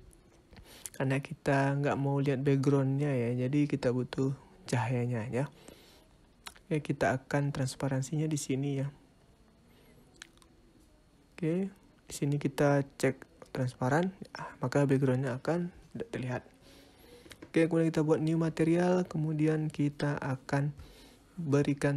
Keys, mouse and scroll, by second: 5.9 scroll up 2, 12.3 click, 15.6 click, 16.8 click, 18.9-19.7 scroll up 9, 19.8 middle click, 20.7 click, 21.5 shift+a.